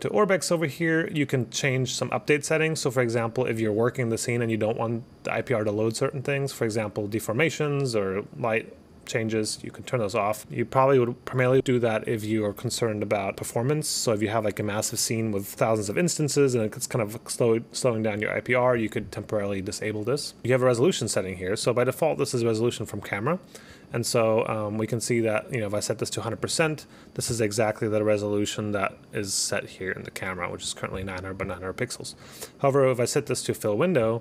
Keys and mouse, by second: 3.7 click, 5.9 click, 6.4 click, 6.7 click, 9.4 click, 10.5 click, 20.4 click, 21.7 click, 22.0 click, 22.8 click, 24.0 click, 24.5 click, 25.5 click, 26.4 click, 28.6 click, 30.7 click, 32.3 click, 33.3 click.